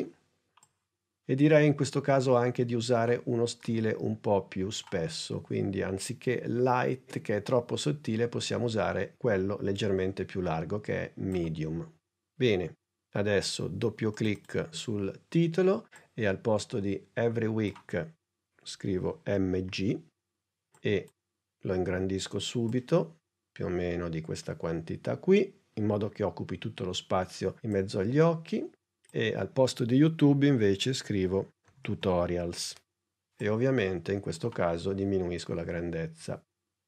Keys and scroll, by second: 18.9 shift+m, 19.5 shift+g, 31.3-32.3 typing.